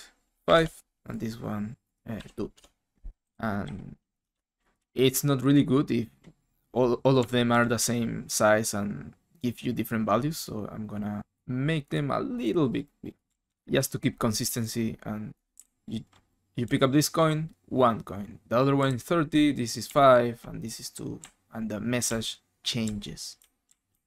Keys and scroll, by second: 0.4 5, 0.5 Return, 2.2-5.3 typing, 2.5 Return, 7.0-7.7 typing, 13.0-13.9 typing, 15.3-17.4 typing, 18.8-24.0 typing.